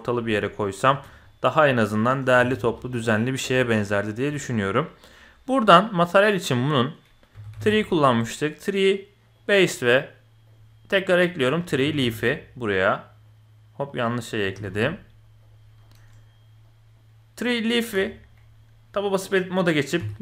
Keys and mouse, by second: 0.3 click, 0.8 Tab, 1.2 drag, 1.8-2.2 drag, 2.4 alt+a, 2.5 z, 3.0 click, 5.2-9.5 drag, 11.2-12.8 drag, 14.1-15.5 drag, 15.8 middle click, 16.6 click, 17.8 Tab, 20.0-20.2 typing.